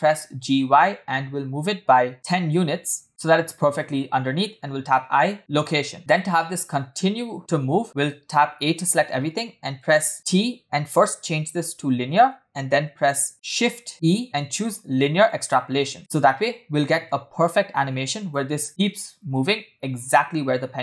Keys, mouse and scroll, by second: 5.0 i, 6.0-7.8 drag, 8.4 a, 10.1 t, 13.6 shift+e, 16.0 space, 17.1 space, 18.2 click, 18.5 space.